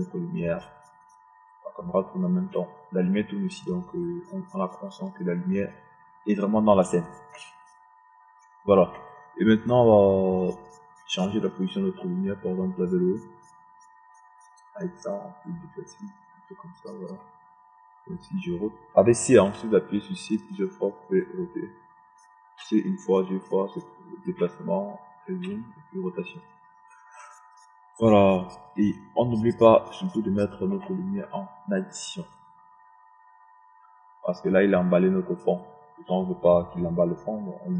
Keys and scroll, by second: 21.9 c, 25.3 c.